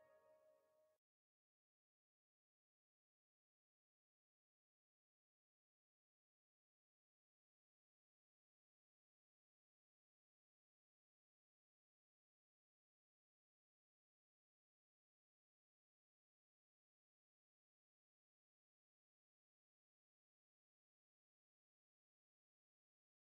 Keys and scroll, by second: 11.6 space.